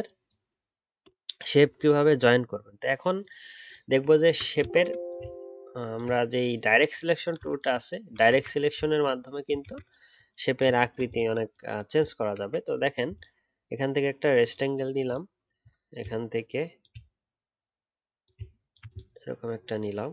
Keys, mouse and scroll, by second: 4.0-7.1 alt+scroll up 1, 8.9-9.6 alt+scroll up 1.